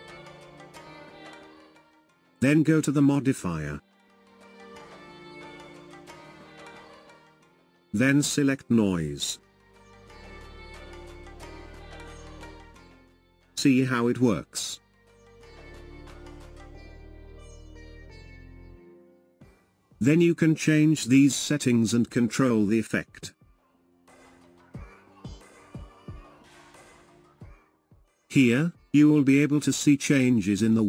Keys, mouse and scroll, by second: 4.5 click, 7.3-10.4 drag, 14.5 space, 18.4 space, 21.7-24.6 drag, 26.2-28.6 drag.